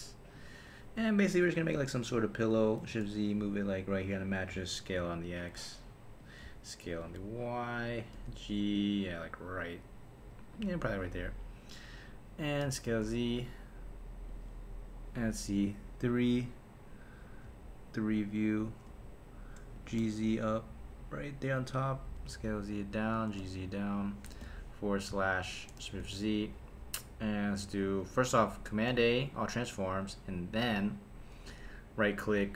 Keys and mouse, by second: 0.3 click, 1.0 KP_7, 1.7 g, 2.6 click, 2.9 shift+z, 3.4 g, 4.2 click, 4.5 s, 5.0 x, 6.2 click, 6.4 s, 6.9 y, 7.8 click, 8.1 g, 10.5 click, 12.6 s, 12.8 z, 14.3 click, 15.8 KP_3, 18.1 KP_3, 19.7 g, 20.0 z, 21.6 click, 22.1 s, 22.3 z, 23.0 click, 23.2 g, 23.4 z, 23.9 click, 24.4 /, 25.9 shift+z, 28.9 super+a, 31.3 Tab.